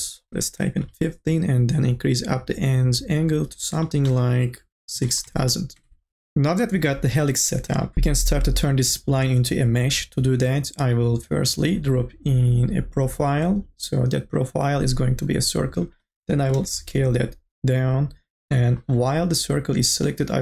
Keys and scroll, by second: 0.0 KP_1, 0.3 5, 0.8 Return, 4.9 KP_6, 5.3 KP_0, 5.8 Return, 16.5 t.